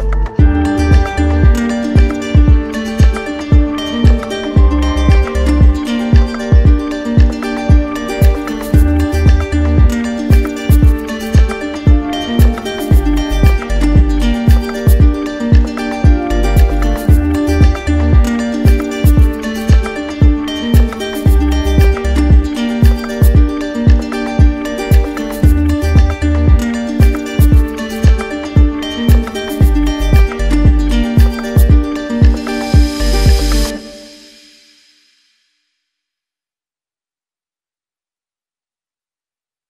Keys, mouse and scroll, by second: 0.0 click, 0.7 click, 1.0 ctrl+z, 4.4 alt+click, 6.4 alt+click, 7.4 click, 8.3 click, 10.7 click, 12.2 click, 13.3 click, 14.6 click, 14.8 d, 15.6 d, 18.0 click, 19.4 click, 20.2 click, 20.7 alt+click, 21.2 alt+click, 21.2 click, 22.2 click, 23.2 alt+click, 24.0 click, 24.7 click, 25.2 d, 29.2 alt+click, 29.9 alt+click, 31.7 click, 33.7 alt+click, 35.5 alt+click, 37.2 alt+click, 38.3 click, 39.3 alt+click.